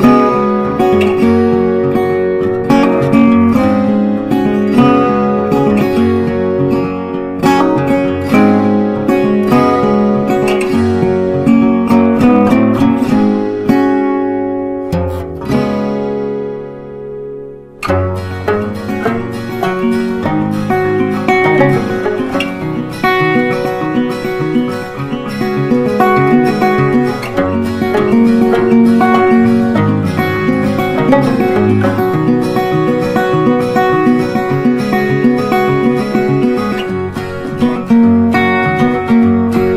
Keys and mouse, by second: 0.1 click, 0.1-3.4 drag, 2.1 right click, 3.4-5.6 drag, 7.5 ctrl+click, 13.0 shift+click, 14.1 c, 15.4 click, 28.6 right click, 30.2-33.0 drag, 35.5 right click, 36.0-37.5 drag, 37.5 right click, 38.9-39.7 drag.